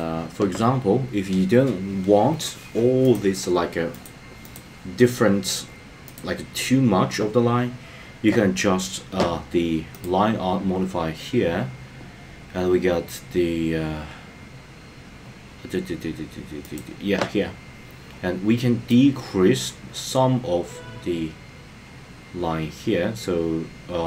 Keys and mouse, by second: 16.7 click, 18.9-24.0 drag.